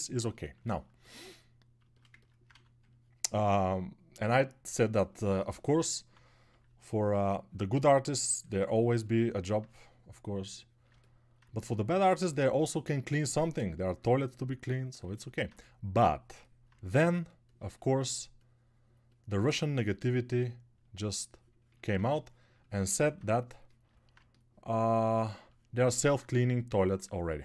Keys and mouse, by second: 2.8 ctrl+1, 6.6 [, 26.3 shift+click, 26.3 shift+middle click, 26.3 shift+right click.